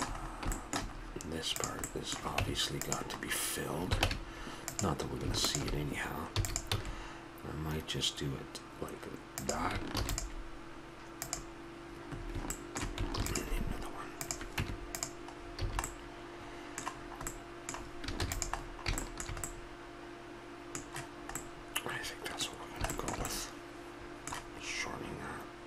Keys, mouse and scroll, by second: 0.0-0.7 middle drag, 1.8-2.1 right drag, 2.4 Tab, 4.1 ctrl+Tab, 6.3 e, 6.7 s, 9.9 ctrl+r, 12.1 middle click, 13.2 ctrl+r, 14.6 Tab, 15.4-16.3 middle drag, 15.7 a, 17.3 middle click, 18.2 ctrl+s, 21.5-23.6 middle drag, 24.1-25.2 middle drag.